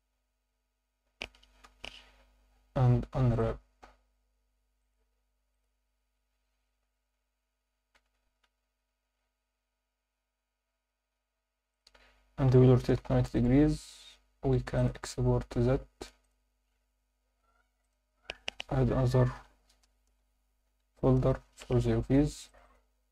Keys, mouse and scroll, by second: 0.5 scroll down 2, 0.6 Tab, 1.6 KP_7, 2.9 u, 4.8-5.6 drag, 6.8 s, 11.7 click, 12.5 r, 12.9 9, 13.0 0, 13.2 click, 14.7-16.7 drag.